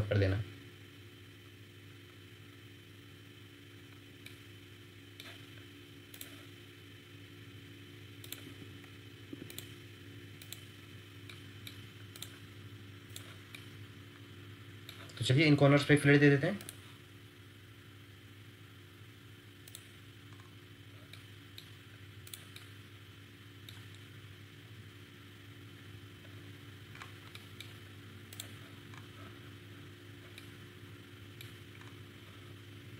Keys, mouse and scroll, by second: 0.0-0.3 scroll up 1, 4.2 middle click, 8.4 Escape, 9.3 Escape, 11.3 middle click, 15.3-16.5 scroll down 1, 20.3-21.1 scroll up 1, 21.1 middle click, 23.9 scroll down 1, 26.7 scroll down 1, 26.9-27.2 scroll up 1, 27.3 ctrl+middle click, 28.8 scroll up 1, 30.3 middle click, 31.7 scroll up 1.